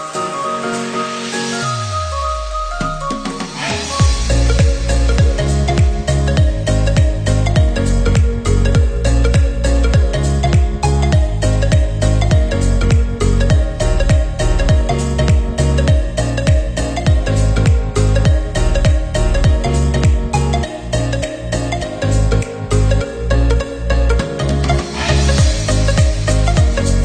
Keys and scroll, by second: 16.2 ctrl+=, 16.7 ctrl+=, 17.6 Up, 18.8 Up, 25.3 ctrl+0.